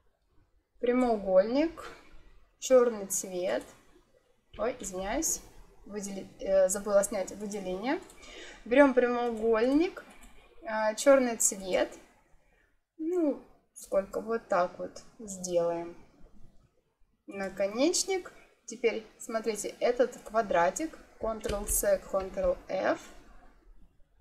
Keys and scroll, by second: 4.7 ctrl+z, 21.3 ctrl+c, 22.1 ctrl+f.